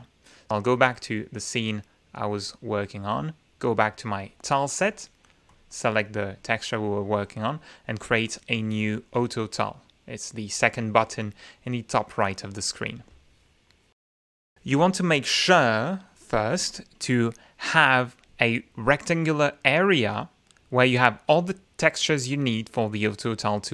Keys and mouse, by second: 0.7 click, 1.2 click, 2.2 click, 4.3 click, 5.6 click, 9.0 click, 14.6 click.